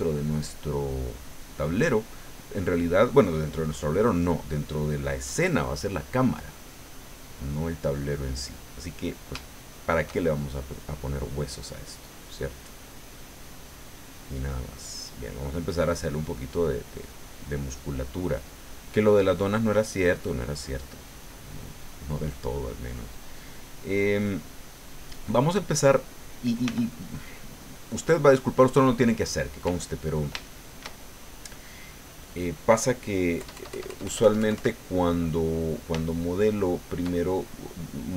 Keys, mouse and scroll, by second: 0.3-1.8 middle drag, 2.5-4.7 drag, 4.9 click, 6.1 click, 6.7-7.7 drag, 7.9 click, 8.8-10.0 drag, 10.1 shift+click, 11.3-13.0 drag, 13.2-15.4 middle drag, 15.5 click, 17.4 click, 18.0 middle click, 19.1 click, 19.6 click, 21.6-22.7 drag, 23.0 middle click, 23.6 click, 23.7 middle click, 24.4 click, 25.7 click, 26.6 f, 27.4 click, 28.3 click, 30.0 ctrl+click, 30.5 ctrl+shift+click, 31.4-32.0 ctrl+scroll down 4, 33.4 KP_Add, 36.0-37.1 shift+middle drag.